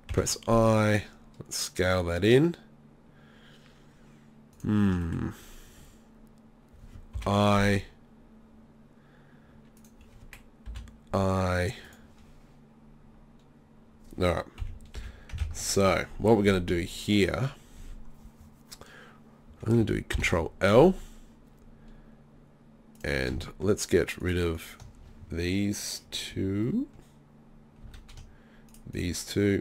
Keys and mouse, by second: 0.1 i, 5.0-7.2 drag, 7.2 i, 11.9-13.9 drag, 14.6 KP_3, 15.0 KP_1, 16.9 middle click, 20.1 ctrl+l, 26.0 click, 26.3 z, 27.8 z.